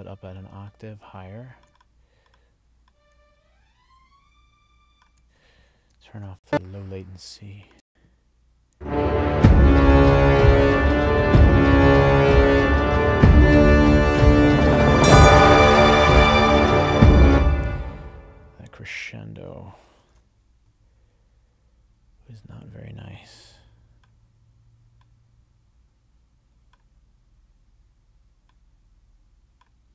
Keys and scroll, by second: 6.1 ctrl+alt+l, 7.8 space, 17.2 space, 20.1 ctrl+alt+l.